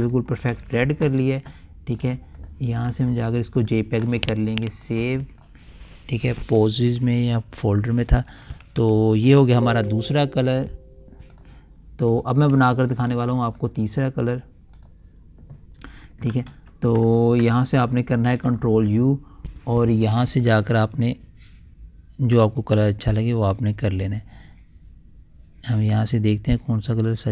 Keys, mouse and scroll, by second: 1.0 ctrl+s, 2.5-7.4 drag, 13.2-13.8 typing, 14.1 click, 17.0 ctrl+z, 18.8 ctrl+u, 20.8-27.3 drag.